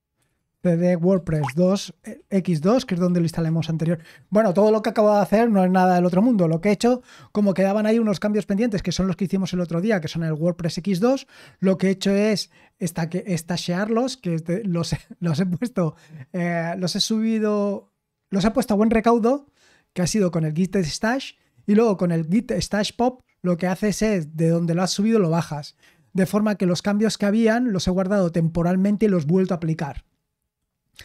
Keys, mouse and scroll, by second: 0.0-3.2 typing, 4.7-5.8 typing.